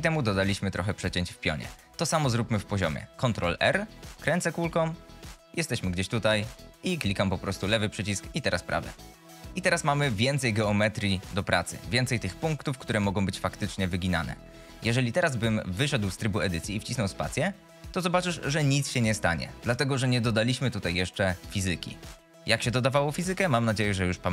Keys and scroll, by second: 3.8 ctrl+r, 10.6 g, 15.3 Tab, 17.1 space.